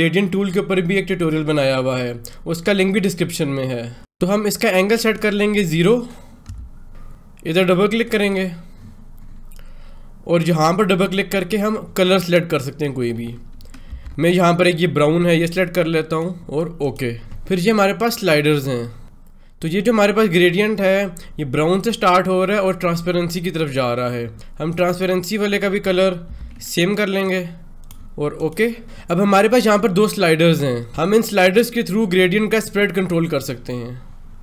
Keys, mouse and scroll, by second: 5.0-6.9 drag, 10.4 click, 13.8 v, 14.1 click, 14.5-16.7 drag, 24.6 click, 26.2 ctrl+v, 27.1 click.